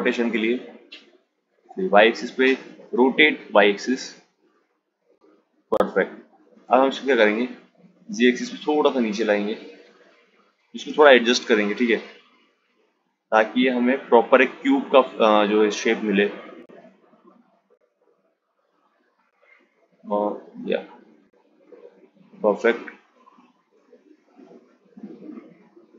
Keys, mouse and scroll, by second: 0.4-1.7 drag, 1.7 r, 5.4 g, 9.7 g, 22.0 g, 25.8 click.